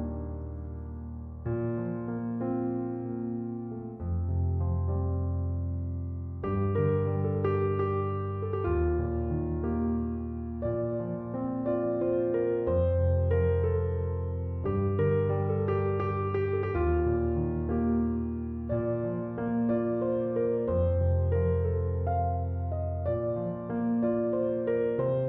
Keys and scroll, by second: 11.7-13.1 typing, 17.4 2, 17.7 Return, 24.6 Return.